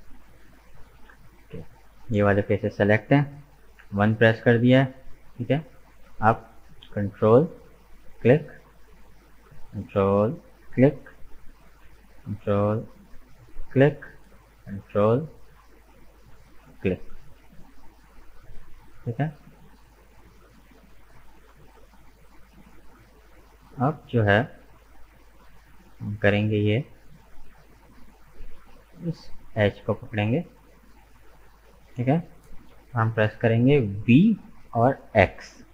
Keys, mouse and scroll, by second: 2.1-3.6 middle drag, 3.6 KP_1, 7.9-13.6 ctrl+drag, 13.7-17.5 ctrl+drag, 17.5-20.6 middle drag, 20.6 right click, 21.1-27.8 middle drag, 27.8-29.4 drag, 29.4 right click, 30.1-34.1 middle drag, 34.1 v.